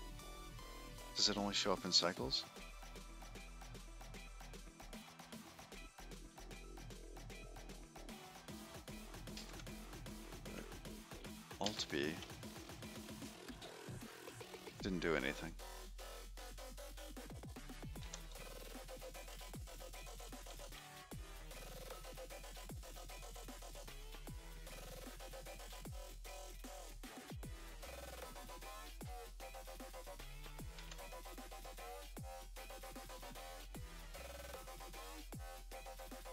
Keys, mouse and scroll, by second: 1.0 click, 2.7 middle click, 3.4-4.0 scroll down 3, 4.4 middle click, 4.8 shift+middle click, 5.8 scroll up 2, 7.4 shift+middle click, 10.4 ctrl+b, 12.5 alt+b, 13.9 click, 17.0 1, 17.7 1, 18.8 1, 19.0 2, 20.2-22.5 typing, 25.0 5, 26.9 click, 27.9 middle click.